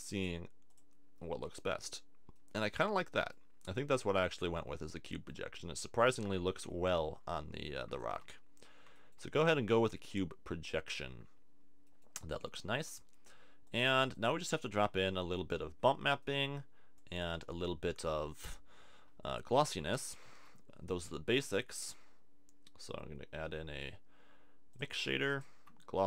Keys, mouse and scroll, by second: 19.3 middle click, 20.2 shift+a, 25.4 click, 25.6 shift+a.